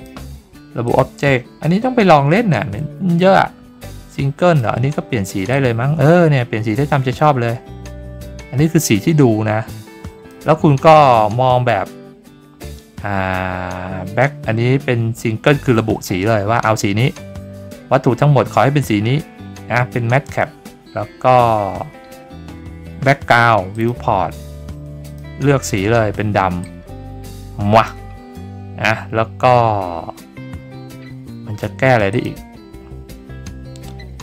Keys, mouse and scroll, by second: 0.8 click, 4.3 click, 5.5-10.3 drag, 23.7 click, 25.0 click, 26.6-27.8 drag, 32.1 click.